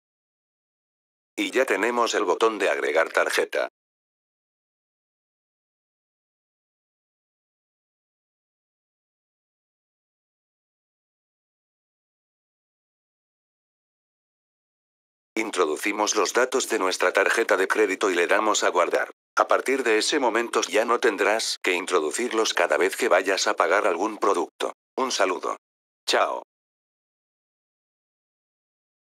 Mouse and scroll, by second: 1.2 click, 4.3 click, 15.2 click.